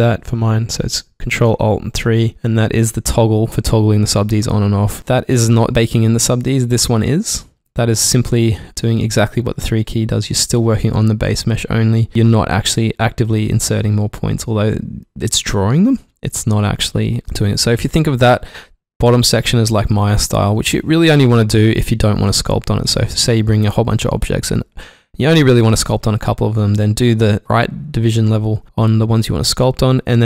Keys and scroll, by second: 2.3 ctrl+alt+3, 3.1 ctrl+alt+3, 17.2 ctrl+alt+Num_Lock.